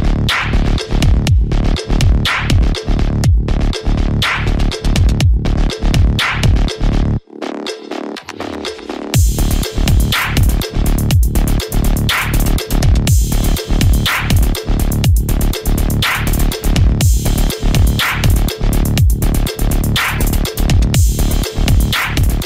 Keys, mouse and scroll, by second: 0.9-6.3 drag, 6.3 right click, 7.3 click, 8.0 scroll down 1, 8.5 click, 9.6 scroll down 1, 11.6 click, 12.5-13.1 scroll down 2, 13.4 click, 14.5 scroll down 1, 16.9 click, 17.4-17.8 scroll down 1, 18.7 click.